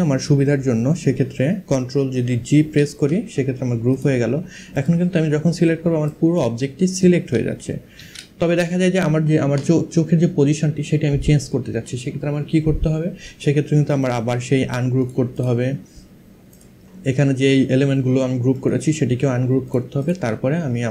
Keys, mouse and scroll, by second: 2.1 ctrl+g, 3.5 click, 5.7 click, 13.6 right click, 14.6 click, 16.2 click, 18.2 right click, 19.3 click, 20.8 click.